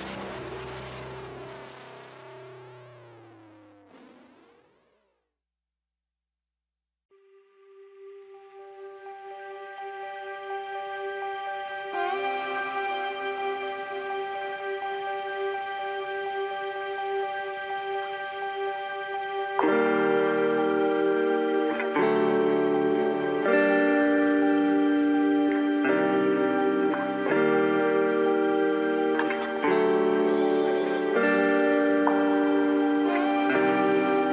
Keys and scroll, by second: 0.2 alt+s, 0.3 alt+c, 30.4 ctrl+a, 31.1 ctrl+x.